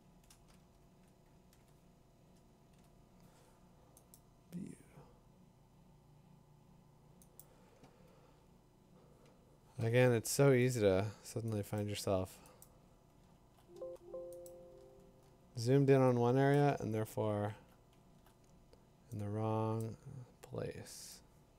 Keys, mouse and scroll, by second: 0.6 ctrl+3, 2.5 ctrl+8, 4.1 click, 8.3 Tab, 10.7 click, 11.8 click, 12.6 click, 13.2 scroll, 14.5 click, 14.8-16.2 scroll, 16.5 click, 16.7 middle click, 16.9 scroll, 17.9 scroll, 20.7 click, 21.1 click.